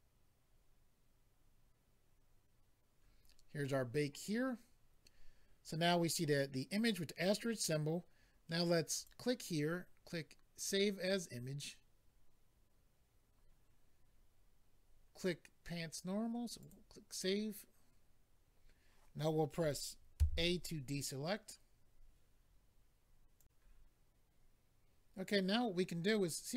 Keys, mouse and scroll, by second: 8.9 click, 9.0 click, 10.5 click, 10.6 click, 16.6 click, 16.7 click, 23.4 click.